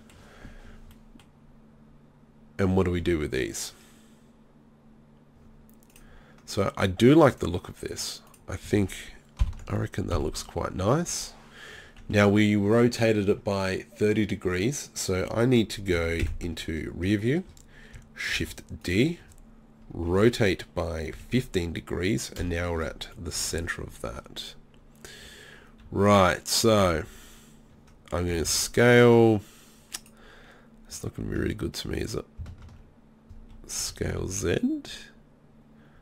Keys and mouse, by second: 0.0 middle click, 9.4 ctrl+l, 10.1 KP_3, 11.1 KP_1, 12.0 KP_3, 16.2 ctrl+KP_1, 18.4 shift+d, 20.1 r, 23.2 click, 26.8 d, 27.0 d, 28.3 s, 30.1 click, 32.6 ctrl+z, 33.8 s.